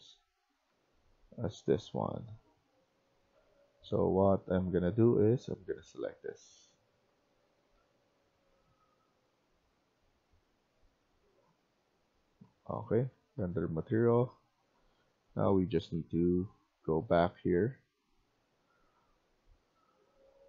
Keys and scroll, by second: 0.0-0.6 typing, 3.2 a, 7.2-8.1 typing, 12.4-18.8 typing, 20.2 a.